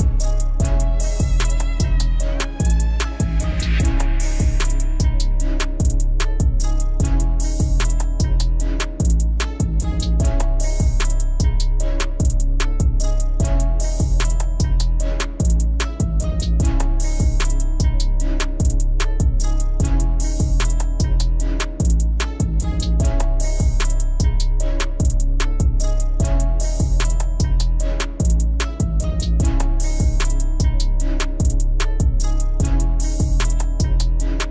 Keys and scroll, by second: 10.3 F4, 26.6 F4.